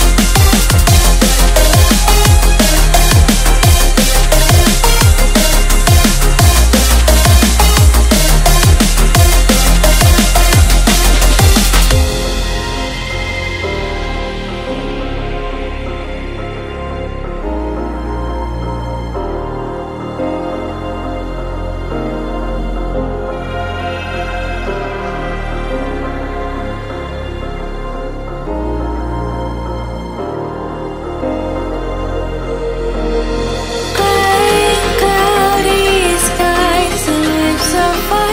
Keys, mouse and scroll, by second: 0.1 e, 0.9 r, 1.8 click, 2.6 e, 3.6 r, 4.9 click, 5.3 e, 6.0 r, 7.4-9.5 shift+middle drag, 7.7 e, 9.8 e, 11.5 r, 11.5 click, 12.3 e, 13.3 r, 14.6 e, 17.7 e, 18.5 r, 19.3 click, 20.3 e, 21.3 e, 21.8 r, 22.9 click, 23.6 shift+middle click, 24.1 e, 24.8 r, 26.0 e, 26.7 r, 28.0 e, 30.5 click, 30.6 s, 31.4 click, 31.6 click, 32.1 e, 33.2 r, 34.0 click, 34.5 shift+middle click, 35.1 e, 37.2 r.